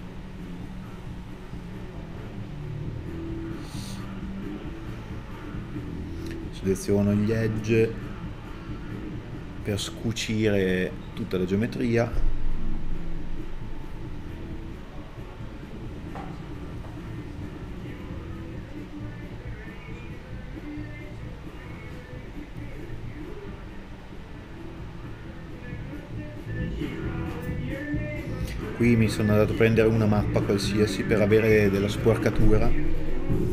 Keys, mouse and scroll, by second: 0.4 middle click, 1.8 scroll up 1, 2.3 alt+right click, 2.5 middle click, 3.6 alt+right click, 4.0 middle click, 4.3 scroll up 1, 5.6 middle click, 5.9 middle click, 6.0 scroll down 1, 6.1 middle click, 6.8 scroll down 1, 7.0 middle click, 7.7 scroll up 1, 7.9 middle click, 8.8 scroll up 1, 8.9 middle click, 9.5 e, 14.1 scroll down 1, 16.1 scroll down 1, 16.2 middle click, 19.3 shift+d, 25.2 a, 32.0 alt+right click, 32.2 KP_Add.